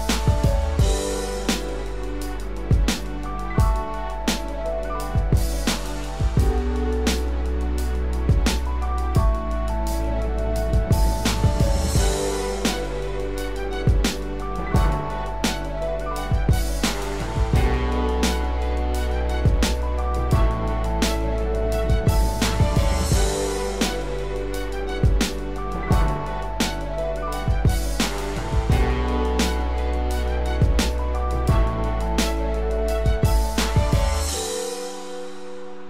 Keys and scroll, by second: 3.5 ctrl+=, 4.4 ctrl+-, 5.1 ctrl+-, 8.1 ctrl+=, 16.4 ctrl+-, 21.3 ctrl+0, 23.1 ctrl+=, 23.9 ctrl+space.